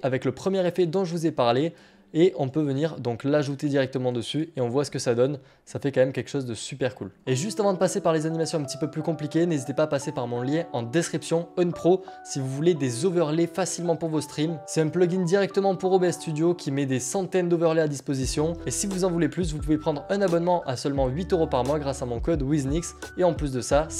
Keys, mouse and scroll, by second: 1.7 click, 4.3 click, 4.3 click.